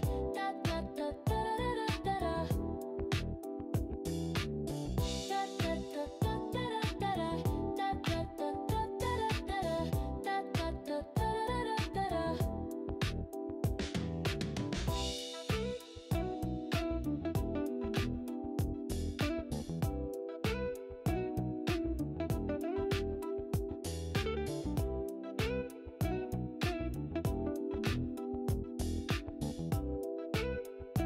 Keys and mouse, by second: 0.0 g, 3.2 click, 5.0 click, 6.1 g, 7.5 click, 10.4 shift+click, 11.3 g, 12.7 click, 17.6 click, 22.4 click, 23.6 e, 26.2 click, 27.5 click, 29.0 click.